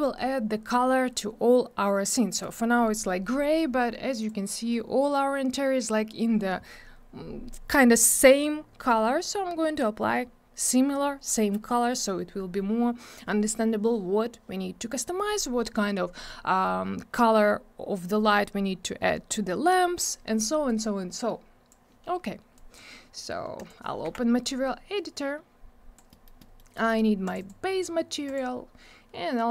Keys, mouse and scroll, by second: 4.2 click, 20.6 click, 22.5 click, 23.5 click, 24.0 m, 25.1 click, 26.1 middle click, 26.4 middle click, 26.5 double middle click, 26.7 middle click, 27.2 click, 27.3 double click, 27.3 click, 28.2 click.